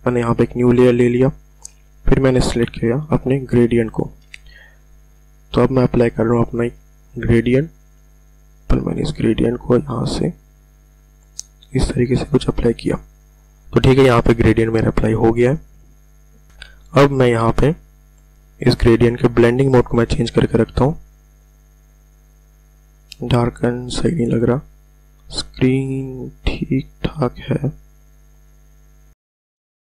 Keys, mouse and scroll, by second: 0.9 click, 3.2 g, 5.1-5.6 ctrl+alt+scroll down 1, 8.8-13.6 drag, 16.9 click, 21.5 click, 24.1-26.1 scroll down 1, 26.6-27.4 scroll down 1, 27.4-28.5 scroll up 2.